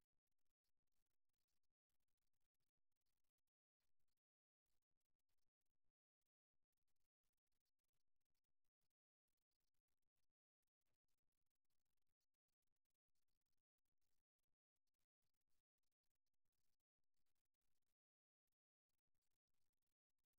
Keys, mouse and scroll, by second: 0.8 right click, 2.6 right click, 6.3 ctrl+r, 9.2 click, 14.2-16.3 right drag, 16.5 middle click, 17.3 e.